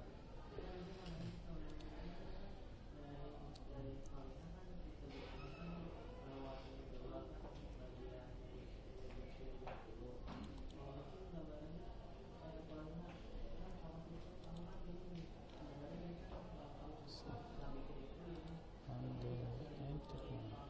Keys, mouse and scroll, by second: 1.7 right click, 5.0 Escape, 8.4 Tab, 11.4 click, 15.4 middle click, 16.1 Escape, 17.0 Escape, 17.0 middle click.